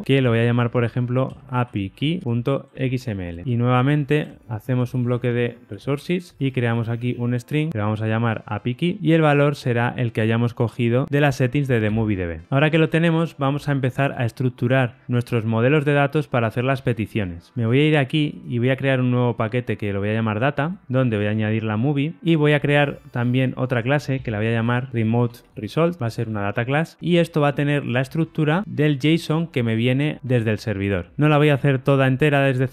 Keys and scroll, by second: 7.7 Tab, 11.9 super+v, 23.2 super+n.